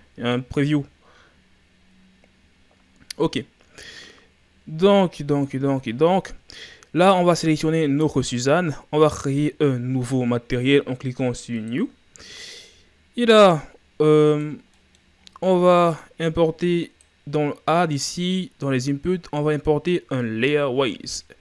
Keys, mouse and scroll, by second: 14.8-21.4 middle drag.